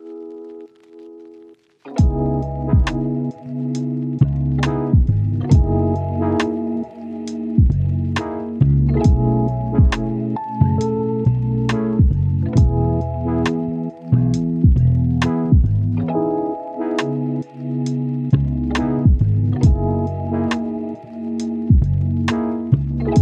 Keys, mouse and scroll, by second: 0.6 click, 1.9-2.6 scroll down 1, 2.6 scroll up 1, 2.8 click, 3.9-4.6 scroll up 1, 4.6 click, 5.4-6.1 scroll down 1, 6.6 scroll up 1, 6.8 click, 7.2 scroll up 1, 7.5 click, 11.7 right click, 12.1-12.5 scroll down 1, 12.5 scroll up 1, 12.6 right click, 12.8 click, 14.8 right click, 16.6 scroll down 1, 16.7 scroll up 1, 16.9 right click, 17.3 scroll down 1, 17.4 scroll up 1, 17.6-18.7 right drag, 18.8 scroll down 1, 18.9 scroll up 1, 19.1 right click, 19.8 scroll up 1, 20.0 right click, 21.0 scroll up 1, 21.2-23.2 right drag.